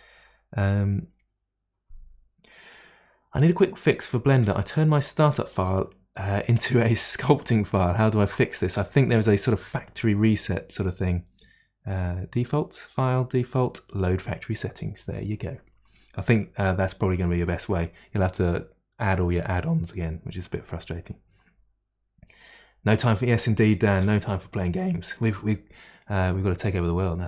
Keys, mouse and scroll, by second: 9.7-15.9 drag.